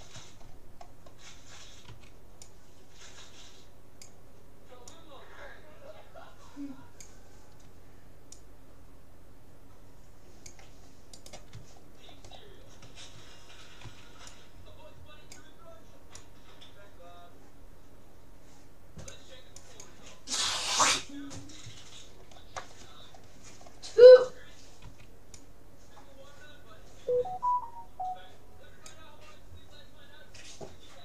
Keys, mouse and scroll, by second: 2.0 c, 11.8-14.6 middle drag, 13.8 c, 20.8-22.4 right drag, 21.2-22.6 middle drag, 23.4 scroll down 1, 23.6-25.6 middle drag, 24.8 c.